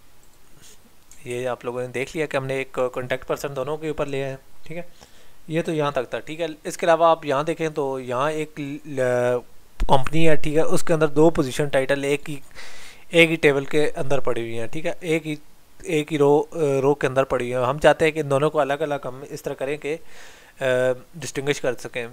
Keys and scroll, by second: 1.3 ctrl+z.